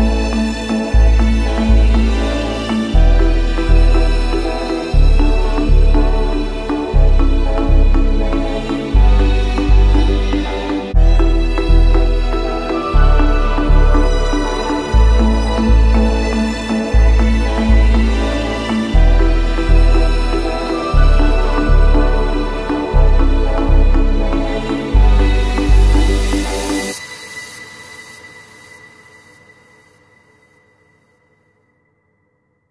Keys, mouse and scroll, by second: 0.4 Down, 1.1 Return, 3.2-4.3 drag, 4.8-6.2 drag, 5.8 ctrl+z, 8.0 right click, 8.7 click, 10.2 click, 11.3 click, 13.8 click, 14.6-15.6 drag, 17.5 click, 18.9 Return, 19.8 click, 20.0 middle click, 20.0-20.6 scroll, 20.6 Return, 21.9 click, 25.2 click, 25.3-26.1 scroll up 5, 26.3-27.6 scroll up 7, 28.4 alt+click, 28.6 ctrl+z, 30.2-30.9 scroll up 4, 30.9 click, 32.0 click.